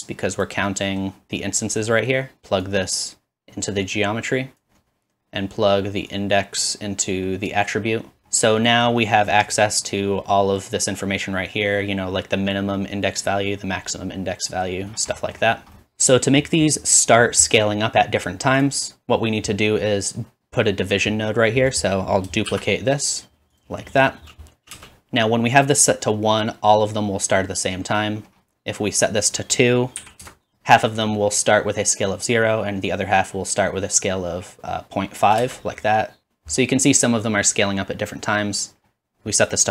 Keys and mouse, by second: 16.8-27.3 drag, 22.5 shift+d, 24.7 space, 27.3-29.3 middle drag, 29.3-30.5 drag, 30.5 space, 33.8-39.7 drag, 35.4 space.